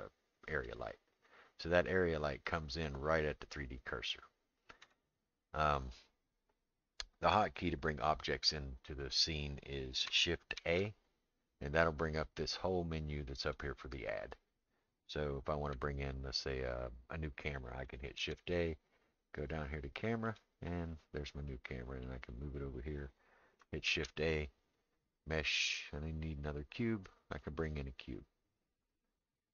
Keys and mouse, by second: 4.8 click, 10.6 shift+a, 13.4 click, 18.2 shift+a, 22.0 click, 23.9 shift+a.